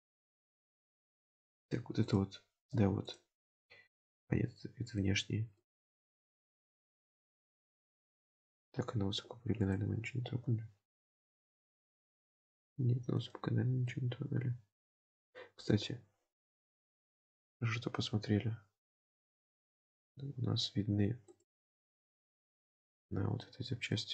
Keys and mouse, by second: 0.2-1.3 middle drag, 1.7 3, 2.1 click, 3.1 shift+click, 3.6-5.0 middle drag, 5.2 alt+z, 5.6-7.4 middle drag, 8.3 click, 9.6 click, 11.8 click, 12.5 middle click, 13.9-15.7 middle drag, 21.4 click, 22.0-22.7 middle drag, 23.0 click, 23.5 Tab, 24.0-24.1 middle drag.